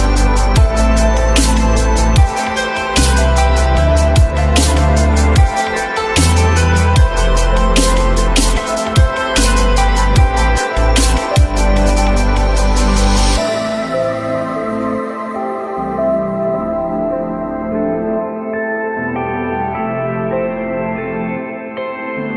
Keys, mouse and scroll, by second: 2.5 ctrl+v, 6.5-7.4 typing, 19.0 F4.